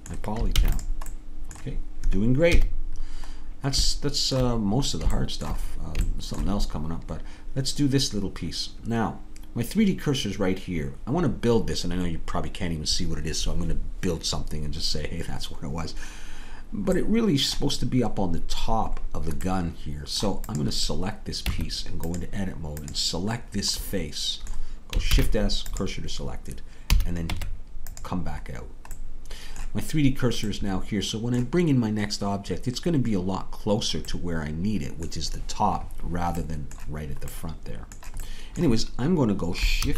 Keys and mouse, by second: 0.6 ctrl+s, 2.6 KP_3, 17.1-20.8 middle drag, 21.5 Tab, 23.5 click, 25.1 shift+s, 26.9 a, 27.3 Tab, 39.8 shift+a.